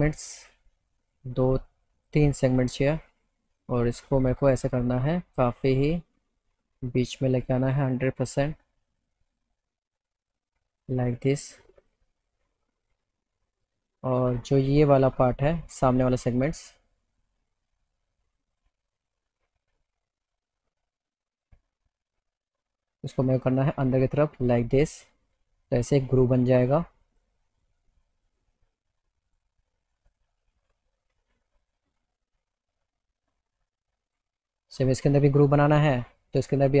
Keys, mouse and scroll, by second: 0.5 click, 2.0 click, 3.6-6.7 drag, 8.0-10.4 drag, 11.3 click, 16.1 click, 17.3 middle click, 18.3 click, 18.5 click, 21.3 click, 23.1-27.2 drag, 27.5-28.5 alt+middle drag, 29.3 click, 29.9 click, 30.6 click, 34.1 click, 35.6-36.6 middle drag, 36.6 click.